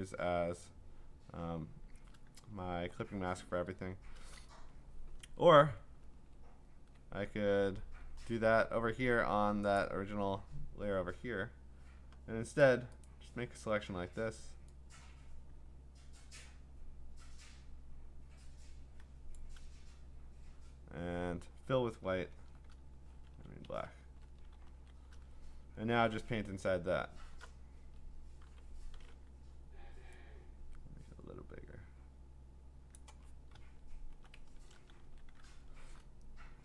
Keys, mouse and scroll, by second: 3.9 scroll, 5.2 ctrl+z, 6.2 ctrl+z, 8.2-9.2 scroll, 9.8 click, 10.1 scroll, 12.6 click, 13.0 click, 19.3 click, 22.2 alt+BackSpace, 23.7 ctrl+z, 24.0 ctrl+BackSpace, 24.7 ctrl+d, 25.3-26.0 scroll up 8, 26.0-26.5 scroll down 10, 26.7-27.0 scroll up 2, 27.0-28.4 scroll down 1, 28.4-30.0 scroll, 28.4 m, 32.9 click, 33.7 alt+BackSpace, 34.5 ctrl+BackSpace, 35.0 ctrl+d, 35.6 scroll.